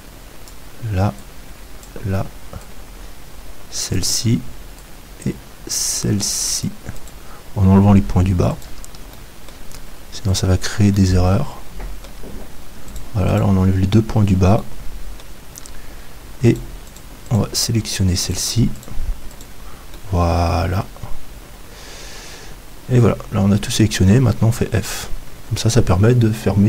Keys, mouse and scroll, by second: 8.5-14.6 right drag, 12.1 middle click, 16.5-20.0 right drag, 21.7 middle click, 24.7 f.